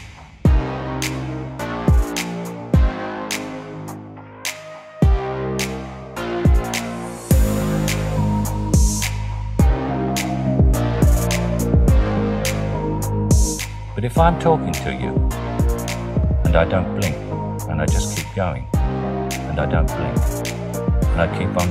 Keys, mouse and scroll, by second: 0.4 click, 0.6 middle click, 0.7 click, 1.3 click, 1.6 g, 2.0 click, 2.7 g, 2.9 click, 3.4 g, 3.7 click, 4.0 click, 4.1 g, 5.1 middle click, 5.8 click, 5.8 middle click, 6.0 click, 6.1 middle click, 6.5 click, 6.8 shift+click, 7.0-7.7 typing, 7.7 click, 8.0-8.8 drag, 9.4 g, 9.5 z, 11.5 click, 12.0 g, 12.1 z, 13.6 g, 13.7 z, 15.2 click, 15.5 click, 16.4 shift+click, 17.8 click, 19.2 l, 19.8 l, 21.3 l.